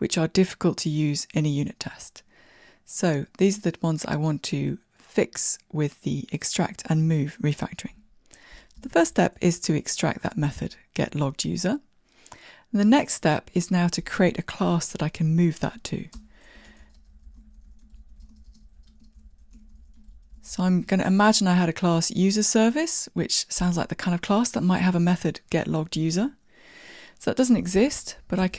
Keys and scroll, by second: 8.8 alt+super+m, 10.5 Tab, 27.8 alt+Return.